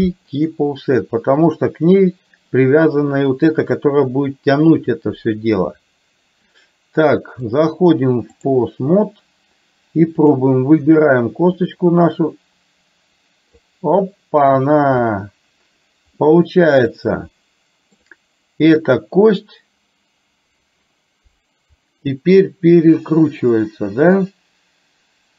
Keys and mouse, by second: 1.9 click, 7.6-8.6 drag, 10.3 click, 11.8-14.0 drag, 16.3-18.0 middle drag.